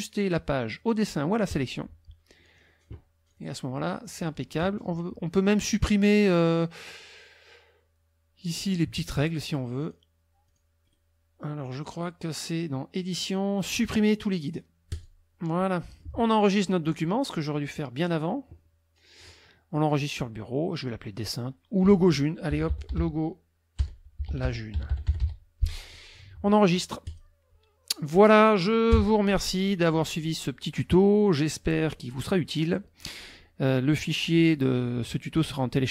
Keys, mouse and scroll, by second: 1.5 click, 3.3 click, 3.8 middle click, 9.8 click, 10.5 click, 11.9 click, 14.9 click, 15.8 middle click, 16.9 click, 18.0 click, 22.3-25.7 typing, 27.1 click, 28.1 middle click, 28.9 KP_5.